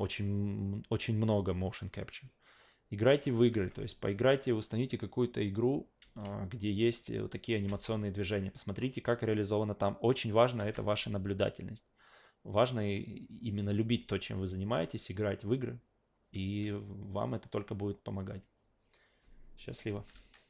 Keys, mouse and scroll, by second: 3.1 click, 3.5 alt+v, 4.1-4.8 alt+drag, 6.0 alt+v, 7.5 click, 7.7 alt+v, 8.1 alt+right click, 8.4-8.8 alt+drag, 10.6 alt+v.